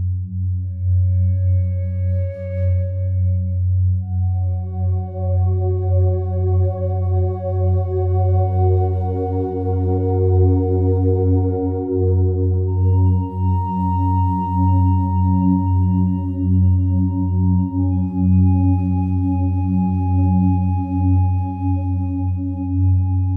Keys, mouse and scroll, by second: 0.9-2.0 drag, 2.6 click, 4.1 click, 4.5-7.1 drag, 10.0-16.8 drag, 17.1-18.7 alt+drag, 19.4 click, 20.7 click, 21.7-22.9 alt+drag.